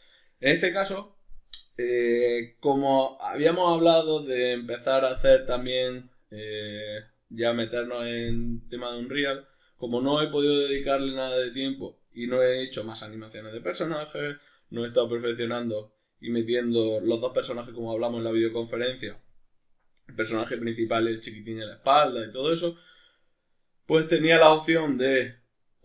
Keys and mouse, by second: 0.3 middle click, 12.5 middle click.